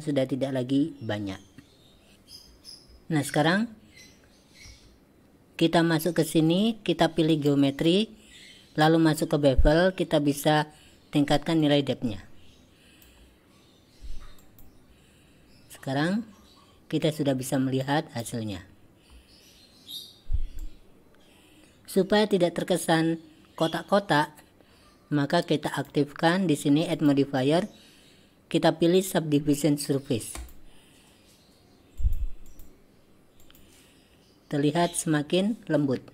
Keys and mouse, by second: 4.7 Tab, 7.4 click, 11.7-13.2 drag, 14.5 click, 17.9-18.3 drag, 20.6-22.0 drag, 27.1-30.6 drag, 32.1 click, 32.6 click, 33.4 click.